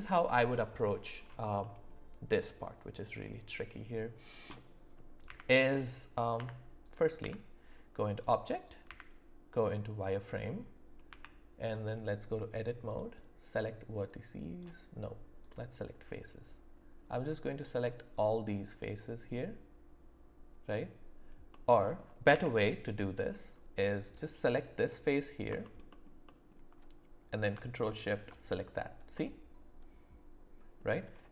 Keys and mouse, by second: 0.5 shift+middle click, 7.2 Tab, 8.9 z, 11.1 Tab, 14.1 click, 15.4 click, 16.1-18.0 drag, 21.5 middle click, 22.3 z, 26.2 alt+middle click, 27.7 ctrl+shift+click, 29.1-30.8 middle drag.